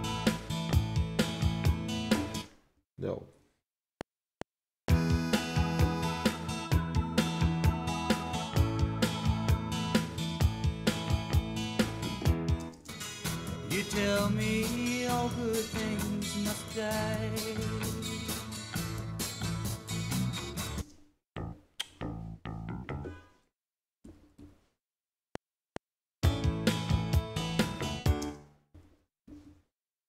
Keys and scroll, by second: 2.3 space, 2.7 z, 3.8 F7, 12.6 space, 13.6 ctrl+Right, 20.8 space, 24.0 Right, 28.2 space, 28.7 Right.